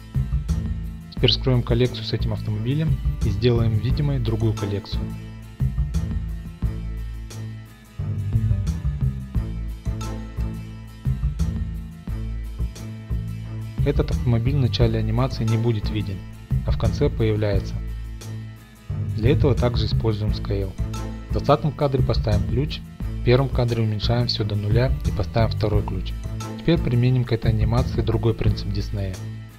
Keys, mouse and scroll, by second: 0.5 click, 3.0 click, 5.7 click, 6.6 middle click, 6.7 click, 6.8 right click, 7.0 click, 7.3 middle click, 7.4 3, 7.7 click, 8.1 Tab, 8.4 z, 8.7 middle click, 9.1 click, 9.4 shift+click, 9.6 p, 9.7 click, 10.3 p, 10.4 click, 11.5 Tab, 12.2 middle click, 12.2 z, 12.4 click, 12.8 Tab, 13.1 Tab, 13.1 middle click, 13.3 z, 13.6 click, 14.2 Tab, 14.4 z, 14.5 middle click, 15.0 click, 15.0 Tab, 15.7 z, 15.9 middle click, 16.2 click, 16.5 click, 16.6 p, 16.7 click, 17.0 click, 17.2 p, 17.3 click, 17.4 middle click, 17.5 z, 18.0 click, 18.1 middle click, 18.6 Tab, 18.8 click, 18.8 right drag, 19.0-20.0 drag, 20.1 drag, 20.4-20.8 middle drag, 21.1-21.9 drag, 22.7 i, 23.1-24.0 drag, 24.1-24.4 drag, 25.0 s, 25.3 0, 25.9 click, 25.9 i.